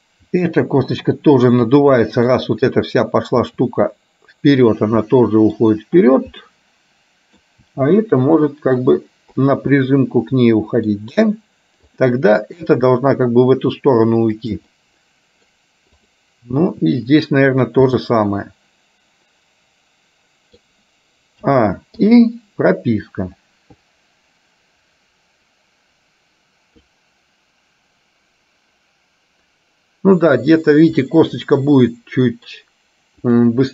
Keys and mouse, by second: 0.4 r, 2.1 middle click, 3.5 r, 5.1 middle click, 6.1 click, 6.6 middle click, 7.8 r, 9.9-11.0 middle drag, 12.0 click, 12.9 r, 14.8 middle click, 16.0 click, 16.9 r, 18.0-20.8 middle drag, 22.3 i, 23.5-30.6 drag, 31.1-32.6 middle drag, 33.5 click.